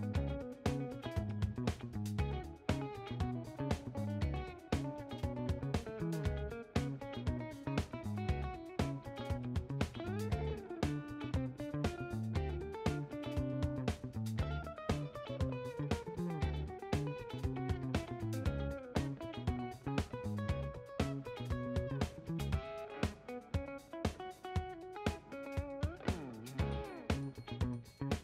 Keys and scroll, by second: 2.4 5, 10.7 7.